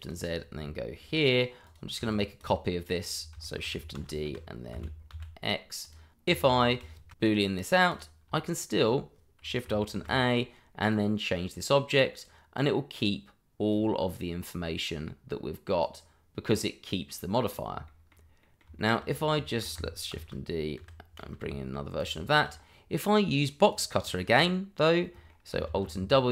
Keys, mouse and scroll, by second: 0.0 click, 1.0 g, 1.6 click, 2.1 shift+click, 2.5 shift+double click, 2.7 middle click, 3.1 scroll down 1, 3.4 shift+middle click, 3.9 shift+d, 4.2 y, 4.7 z, 5.8 click, 7.1 ctrl+KP_Subtract, 7.2 click, 8.4 shift+middle click, 8.7-9.4 scroll up 1, 9.9 ctrl+alt+a, 10.9 click, 17.4 scroll down 1, 17.8 shift+middle click, 18.4 middle click, 19.4 shift+middle click, 19.5 middle click, 20.1 m, 20.1 shift+d, 20.7 y, 21.4 x, 21.9 click, 22.2 shift+middle click, 22.3 middle click, 22.5-22.9 scroll up 1, 22.9 middle click, 23.6 click, 25.0 middle click, 25.6 alt+w.